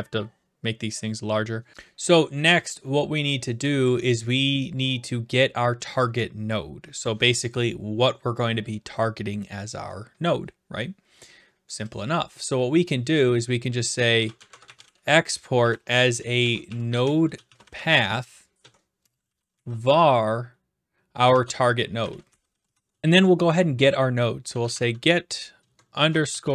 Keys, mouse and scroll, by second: 6.9 Return, 12.0 click, 13.9-20.0 typing, 21.3-23.2 typing, 24.2-26.5 typing.